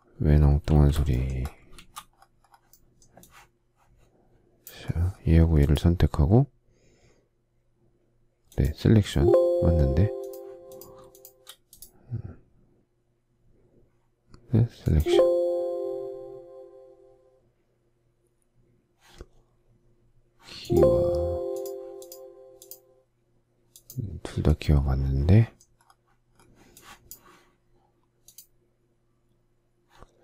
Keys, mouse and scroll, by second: 0.7 shift+a, 1.8 shift+z, 11.1 shift+click, 11.2 shift+double click.